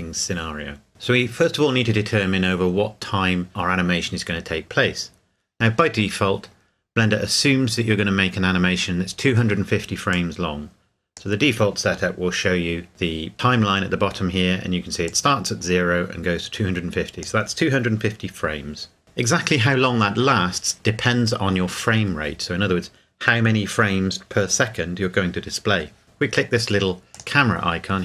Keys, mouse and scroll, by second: 10.1 click, 15.4 click, 27.1 click.